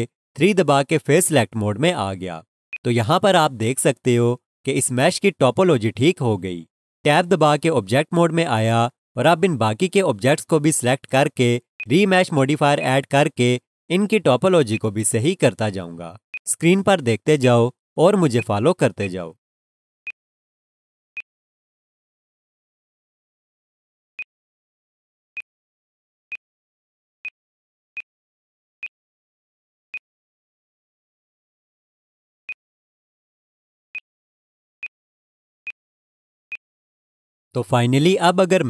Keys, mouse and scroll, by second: 0.3 Tab, 1.6 3, 1.7-2.5 scroll down 1, 2.5 scroll, 2.7 alt+shift+click, 7.9 Tab, 11.8 click, 24.1 click.